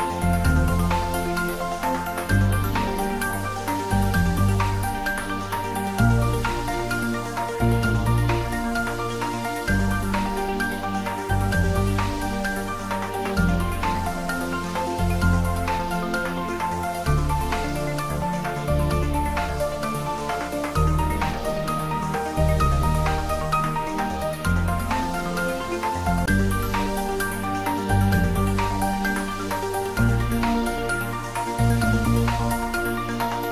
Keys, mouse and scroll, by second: 11.9 click, 14.8 click, 14.9 click, 18.5 click, 18.7 click, 25.8 click, 27.2 click, 28.1-29.1 scroll up 1, 29.1-30.9 drag, 30.9-33.5 drag.